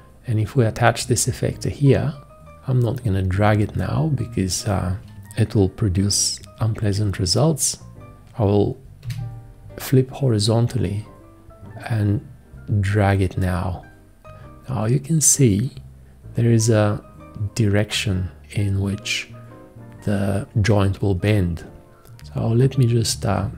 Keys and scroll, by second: 9.0 h.